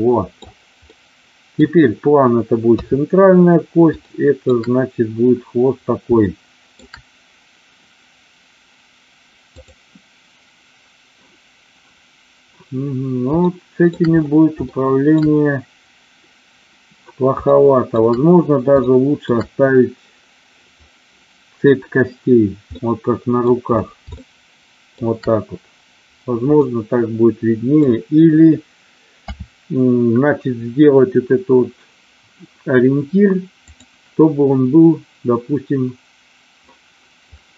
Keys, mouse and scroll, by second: 0.9-1.7 middle drag, 2.7 KP_3, 4.1-4.5 shift+middle drag, 6.3 shift+middle click, 9.6 click, 13.5-13.8 shift+middle drag, 14.7-15.2 shift+middle drag, 17.4-17.9 shift+middle drag, 18.9-19.2 shift+middle drag, 22.7-23.4 middle drag, 24.2-24.8 shift+middle drag, 26.6-27.8 middle drag, 29.0 KP_5, 33.6-36.7 drag, 37.2-37.5 drag.